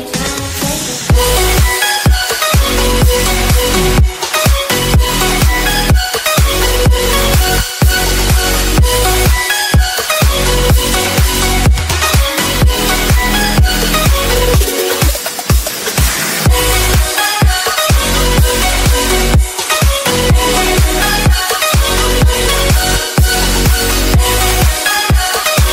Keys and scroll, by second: 9.7 ctrl+r, 10.4 ctrl+z, 11.8 ctrl+r.